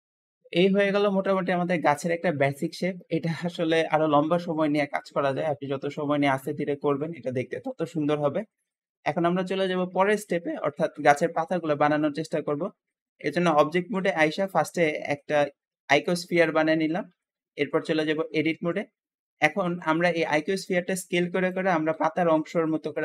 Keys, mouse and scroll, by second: 9.0 KP_1, 9.0 1, 10.5-12.6 shift+middle drag, 12.6-13.4 scroll up 1, 13.4 scroll up 1, 13.5 shift+a, 16.4-16.7 scroll down 2, 17.2-18.4 scroll up 2, 18.4 Tab, 20.5 click, 21.8 s.